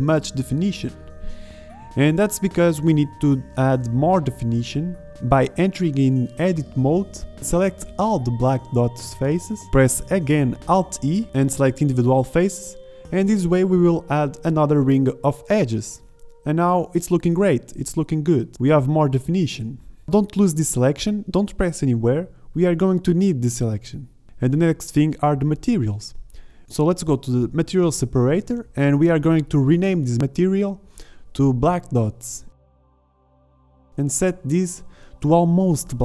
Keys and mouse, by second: 1.9 Tab, 4.7 alt+e, 15.8-16.3 middle drag, 16.3 z, 16.9 z, 18.1 Tab, 19.9 Tab, 25.4 z, 26.6 z.